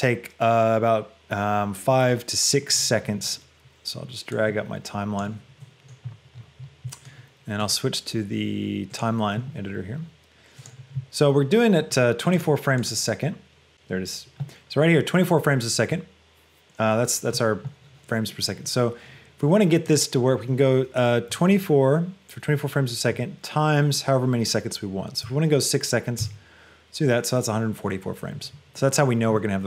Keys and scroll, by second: 21.4 KP_2, 21.8 KP_4, 23.2 KP_Multiply, 26.2 Return.